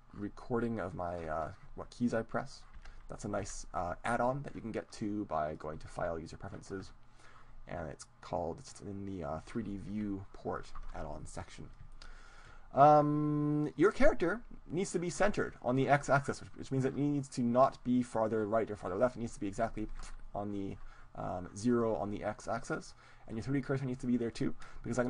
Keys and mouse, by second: 2.9 n, 4.5 n, 5.6-8.2 drag, 9.8 n, 12.0-13.6 middle drag, 17.8-20.6 drag, 20.6 ctrl+z.